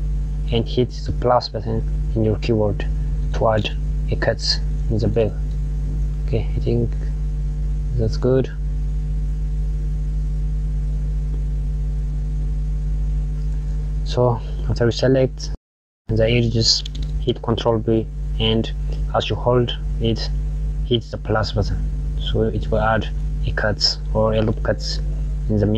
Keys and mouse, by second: 11.2 click, 12.7 KP_Add, 14.9 click, 21.8 click.